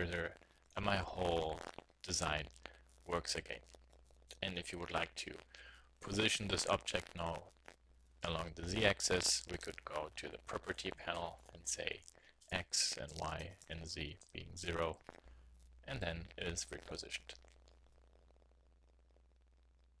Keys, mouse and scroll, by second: 0.1-1.5 drag, 7.5 n, 9.3-11.4 middle drag, 11.4-13.0 drag, 15.3 z.